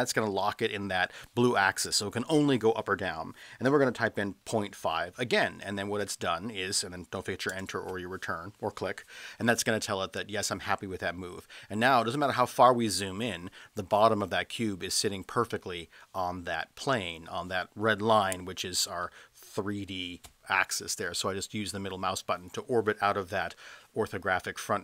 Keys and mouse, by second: 4.5 KP_Decimal, 4.8 KP_5, 7.5 Return, 19.0-19.9 middle drag.